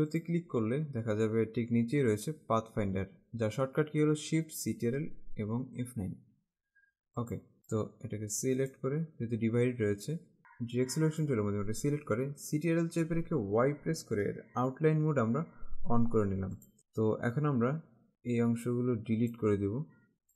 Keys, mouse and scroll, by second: 0.3 click, 7.3 click, 7.8 click, 10.4 click, 13.3 ctrl+Caps_Lock, 16.7 click, 17.4 click.